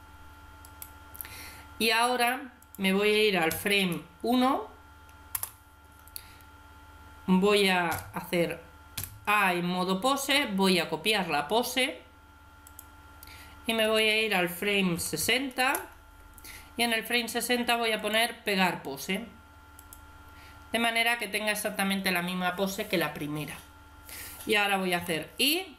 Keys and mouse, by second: 0.5 right click, 2.4-4.3 drag, 7.8 a, 8.8 a, 10.5-12.3 drag, 13.7-15.4 drag, 15.4 middle click, 17.8-19.6 drag, 24.8 i.